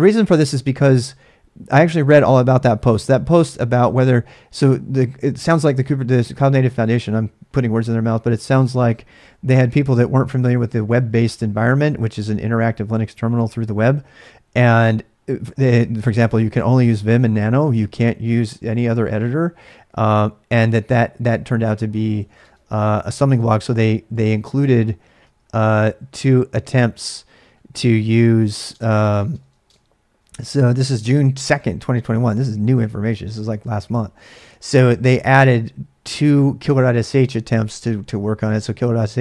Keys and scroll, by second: 21.8-22.9 typing, 25.5 Return, 25.8 typing, 27.8-28.7 typing, 30.5-31.4 typing.